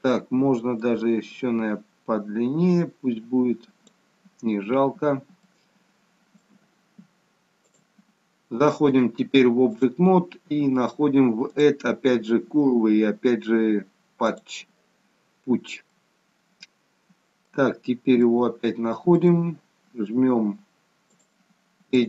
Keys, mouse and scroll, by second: 0.9 click, 5.4 shift+middle click, 7.7 click, 8.9 click, 11.4 click, 15.8 middle click, 17.7-18.1 scroll up 5, 18.1 shift+middle click, 21.0 click.